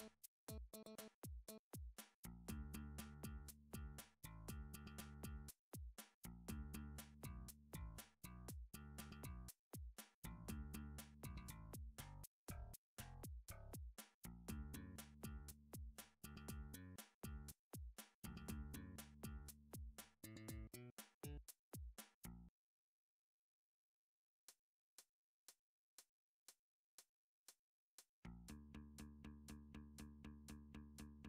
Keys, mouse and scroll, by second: 0.8 click, 1.4 alt+click, 2.6 s, 3.8 click, 4.8 ctrl+r, 5.3 click, 5.5 click, 6.1 s, 8.2 click, 8.7 alt+click, 9.1 middle click, 9.2 middle click, 9.7 shift+middle click, 10.3 alt+click, 10.3 shift+middle click, 12.0 s, 12.2 x, 13.4 s, 13.6 click, 14.7 ctrl+r, 15.4 right click, 15.6 scroll, 16.1 shift+middle click, 17.1 shift+middle click, 18.1 ctrl+r, 18.7 middle click, 19.0 scroll up 1, 19.1 click, 19.3 click, 19.9 alt+click, 20.1 alt+click, 20.7 g, 21.5 y, 22.9 click, 23.4 s, 23.7 x, 24.7 click, 25.2 alt+click, 26.1 s, 26.9 g, 27.2 y, 27.9 click, 29.0 click, 29.7 g, 29.9 y, 31.1 click.